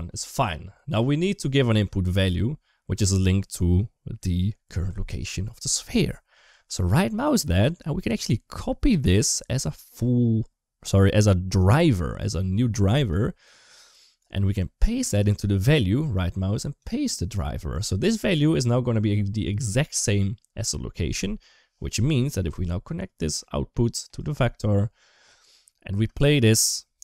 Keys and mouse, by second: 0.2 click, 7.1-12.9 right drag, 15.1-16.7 right drag, 22.0 middle click, 22.9 click, 23.1-24.0 drag, 25.7 space.